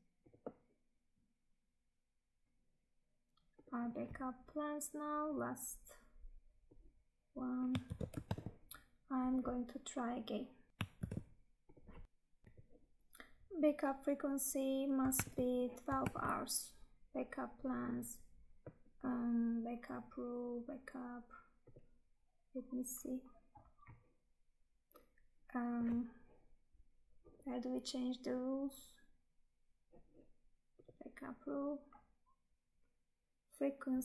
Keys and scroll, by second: 2.4 Tab, 7.7 ctrl+c, 8.4 Tab, 10.9 ctrl+v, 15.3 Tab.